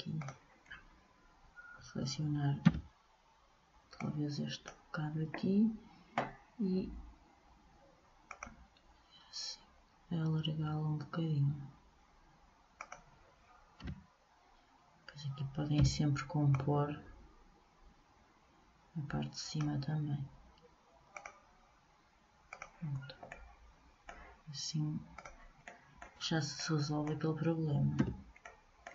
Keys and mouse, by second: 2.8 b, 8.4-10.2 drag, 13.9 a, 15.9 b, 21.2 right click, 21.3-23.0 drag, 23.0-24.2 middle drag, 25.3-27.1 drag, 28.2 a.